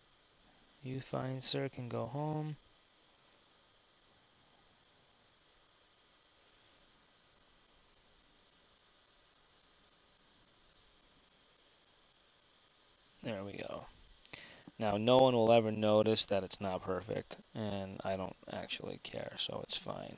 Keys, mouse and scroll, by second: 1.2 g, 7.5-8.6 drag, 11.4 g, 15.0 `, 16.2 `, 17.5 z, 17.8 z.